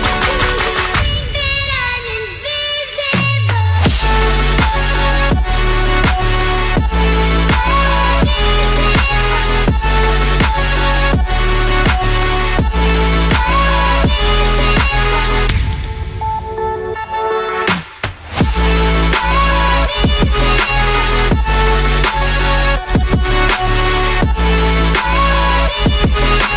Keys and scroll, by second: 0.1 0.